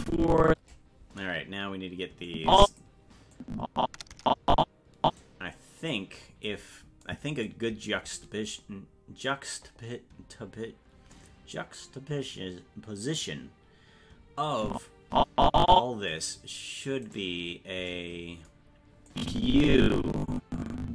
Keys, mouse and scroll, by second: 2.3 click, 3.4-5.2 drag, 5.9 right click, 7.1 click, 14.6-16.3 drag, 17.2 right click, 19.1-20.9 drag.